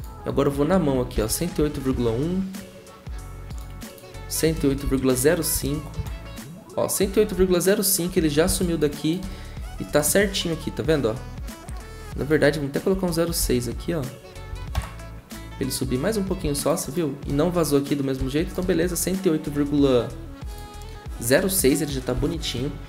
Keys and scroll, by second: 0.7 Right, 1.1 shift+Left, 1.6 1, 1.9 Return, 4.5 Right, 4.8 shift+Left, 5.3-6.1 typing, 12.9 Right, 13.4 shift+Left, 14.5 6, 14.7 Return.